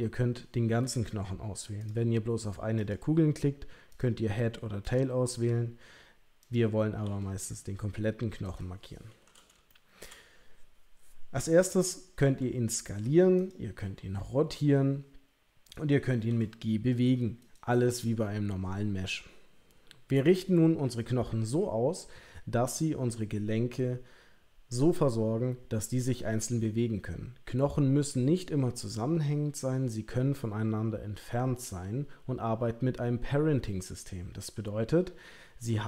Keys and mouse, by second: 1.8 click, 2.8 click, 6.4 click, 7.0 g, 9.7 shift+middle click, 12.2 s, 13.8 r, 16.3 g.